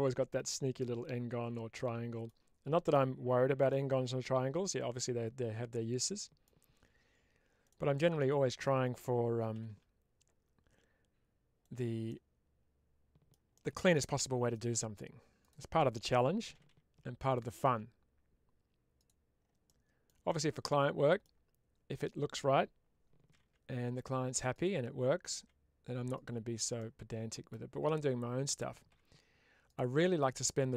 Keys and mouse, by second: 2.8 middle click, 3.6-6.3 middle drag, 7.5 click, 8.1 middle click, 11.5 click, 11.9-13.2 middle drag, 13.8 middle click, 15.3-17.6 drag, 18.9 click, 19.5 middle click, 21.8-24.6 drag, 26.0 click, 26.6 middle click, 28.4-29.6 drag, 29.8 middle click.